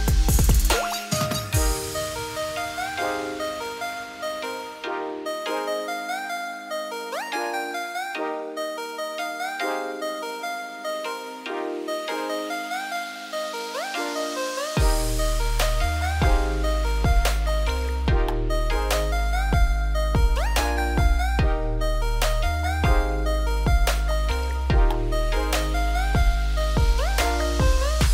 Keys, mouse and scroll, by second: 2.2-5.4 middle drag, 8.1-8.9 middle drag, 8.9 click, 9.2-9.7 middle drag, 9.7-10.0 scroll up 1, 10.0-10.6 shift+middle drag, 10.6 click, 10.8-14.6 middle drag, 14.6-15.2 scroll down 2, 15.2-15.5 scroll up 1, 15.5-15.8 middle drag, 15.8-16.1 scroll up 2, 16.1 click, 16.5-16.9 middle drag, 16.9 `, 17.3-17.7 scroll up 2, 17.7 shift+middle drag, 18.0 scroll up 1, 18.2 z, 18.8 click, 19.3 g, 21.9-22.4 middle drag, 22.4 Tab, 23.2 click, 23.5 2, 23.9 click, 24.4 shift+s, 25.0 Tab, 25.1 Tab, 25.4 z, 25.9 middle click, 26.3 Tab, 26.4 click, 26.6 Tab, 26.8 scroll down 2, 26.9 middle click, 27.3 3, 27.5 click.